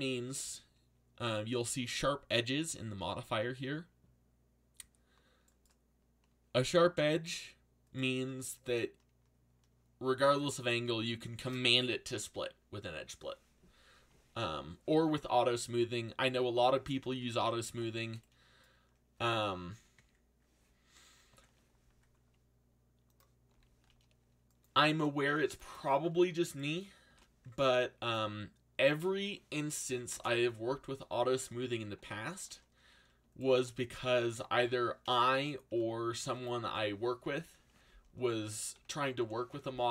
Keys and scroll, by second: 17.6 ctrl+z, 23.5 z, 24.7 c, 27.1 shift+d, 27.6 z, 29.6-30.5 typing, 31.9 z, 32.8 a, 34.6 z, 39.2 ctrl+l.